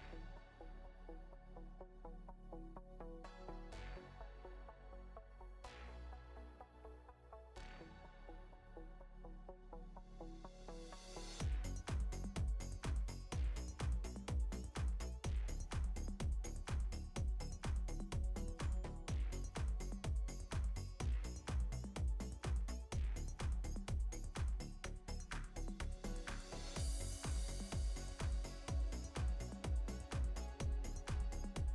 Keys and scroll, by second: 1.2 space, 2.5 space, 8.1 space, 10.4 space, 13.1 space, 13.7 ctrl+space, 18.1 space, 20.3 space, 21.1 space, 23.3 ctrl+-, 27.5 space, 28.1 space, 29.5 space.